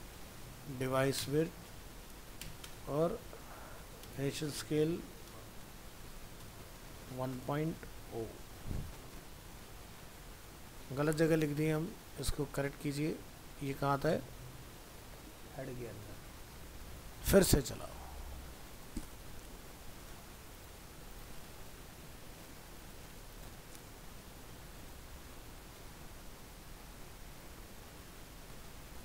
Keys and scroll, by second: 8.1 ctrl+s, 12.3 ctrl+x, 18.4 ctrl+s.